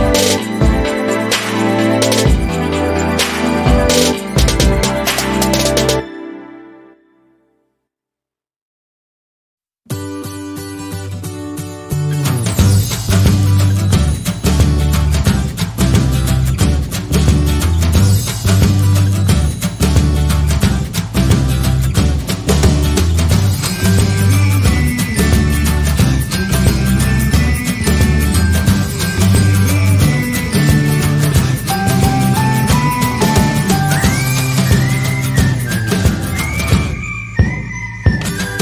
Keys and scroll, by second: 1.7 ctrl+a, 2.1 typing, 2.7 Return, 7.8 ctrl+v, 18.7 ctrl+v, 33.5 Down.